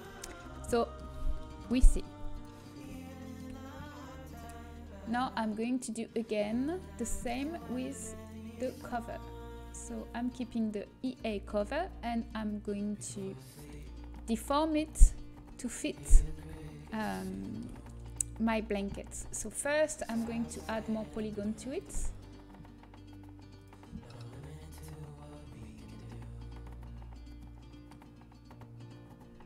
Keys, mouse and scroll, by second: 3.2 ctrl+s, 5.7-7.7 drag, 7.9-11.5 drag, 11.0-14.1 middle drag, 14.7 middle click, 15.1-16.7 drag, 15.3 Tab, 16.7 middle click, 16.7 a, 20.1-23.8 drag, 24.7-29.4 drag, 27.4-29.4 middle drag, 27.4-29.4 right drag.